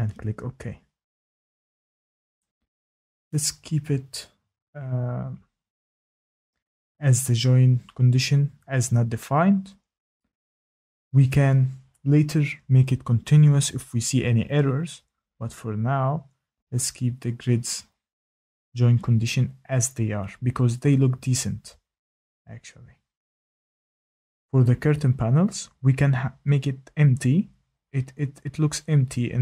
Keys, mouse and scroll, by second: 0.0-0.5 typing, 6.5 click, 11.8 click, 12.3 click, 24.6 click, 26.9 click, 27.6 click.